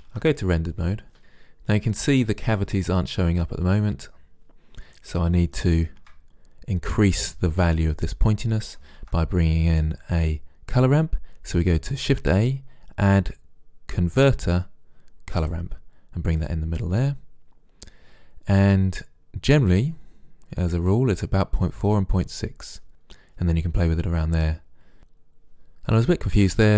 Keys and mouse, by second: 0.6 shift+z, 9.0 shift+a, 16.6-18.3 drag, 20.9 click.